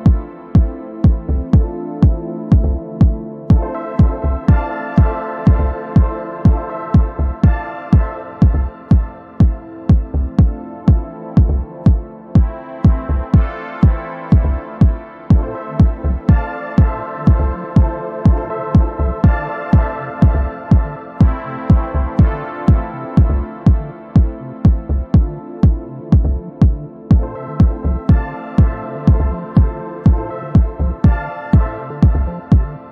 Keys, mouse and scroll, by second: 0.3-9.1 drag, 10.3 ctrl+z, 11.1 click, 11.6 ctrl+z, 12.6 click, 14.6-15.6 typing, 16.8 ctrl+z, 17.2 click, 17.6-18.9 typing, 19.8 click, 20.4-20.7 ctrl+scroll up 1, 21.1 click, 22.5 ctrl+shift+g, 23.7-24.8 click, 24.9 ctrl+z, 25.1-27.1 drag, 27.2-27.9 ctrl+scroll up 1, 28.3-28.9 ctrl+scroll up 1, 28.9-30.2 drag, 30.5 ctrl+scroll down 1, 31.5-32.9 drag.